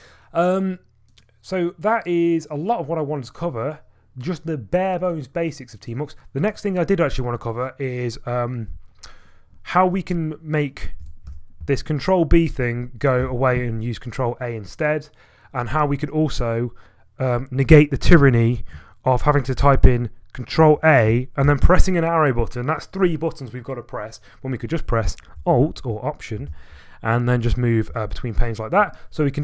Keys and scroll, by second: 11.3 ctrl+b, 13.2 ctrl+a, 20.6 ctrl+a, 21.4 Page_Up, 25.5 alt+Left, 26.5 alt+Right, 28.1 alt+Left, 28.4 alt+Right.